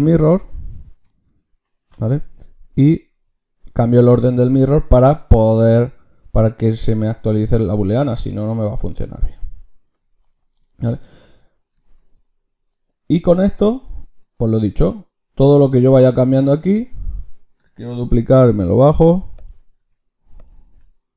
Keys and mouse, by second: 8.3 middle click, 8.5 middle click, 8.7 middle click, 14.5-16.5 drag, 16.5 Tab, 17.8 shift+d, 19.7 s, 20.6 Tab.